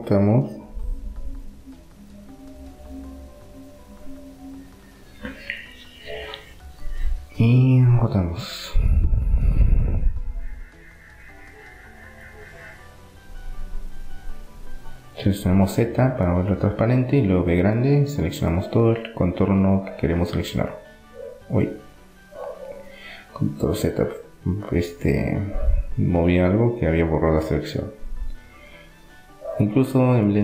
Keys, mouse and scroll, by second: 3.8-7.3 right drag, 7.8-9.5 right drag, 8.5-12.8 middle drag, 14.3 z, 16.2 b, 16.8 click, 20.5 a, 22.3 ctrl+z, 23.8 z, 25.2-27.1 middle drag, 27.5 r.